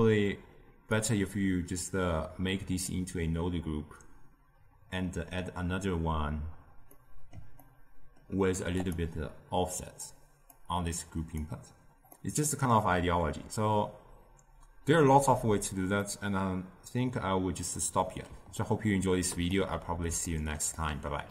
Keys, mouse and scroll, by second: 1.0-4.1 drag, 6.9-8.7 middle drag, 8.7 click, 10.5 click, 12.1-21.3 middle drag.